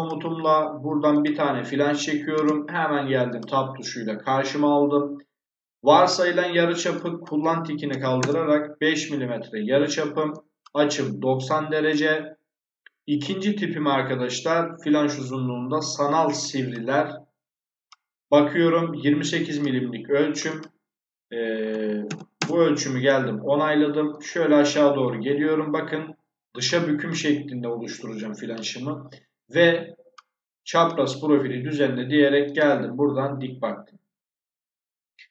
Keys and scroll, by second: 2.2 space, 7.8 5, 8.1 Return, 21.6 2, 22.0 8, 22.3 Return.